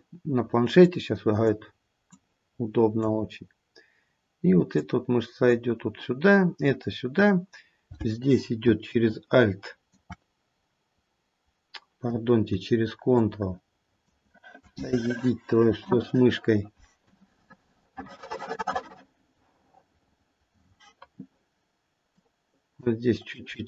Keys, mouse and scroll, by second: 0.8 click, 2.1 click, 4.7 click, 9.1 alt+click, 13.1 ctrl+click, 22.2 ctrl+click, 23.3 ctrl+click.